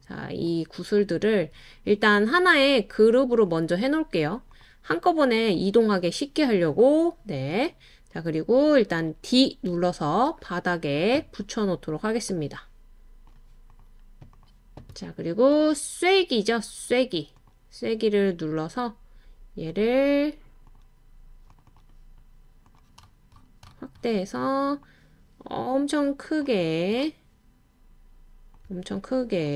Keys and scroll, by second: 9.7 d.